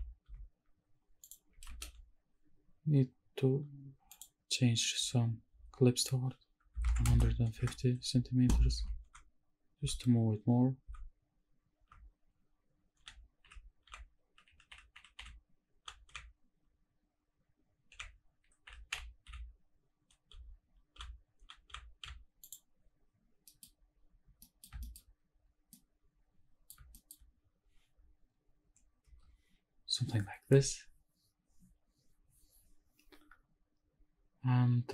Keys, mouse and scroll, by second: 0.0 w, 0.4 w, 1.2 click, 1.7 ctrl+space, 4.1 click, 6.0-7.6 drag, 8.8 shift+`, 9.8 s, 11.0 s, 12.0 d, 13.1 d, 13.5 a, 14.0 d, 15.1 a, 16.1 d, 17.9 d, 19.3 a, 22.2 d, 22.4 click, 23.5 middle click, 23.6 middle click, 23.8 scroll down 2, 24.4 middle click, 24.8 shift+middle click, 25.1-25.4 scroll up 3, 26.3-26.7 middle drag, 26.9 shift+middle click, 29.1 KP_0, 33.8-34.1 scroll up 2.